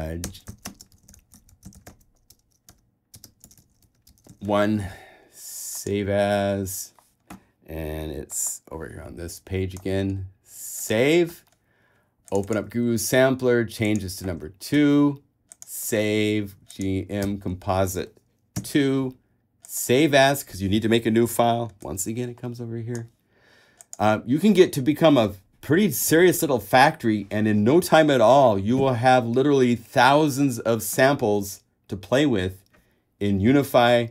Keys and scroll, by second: 0.2-4.5 typing, 14.9 super+w, 17.4 BackSpace, 18.7 2.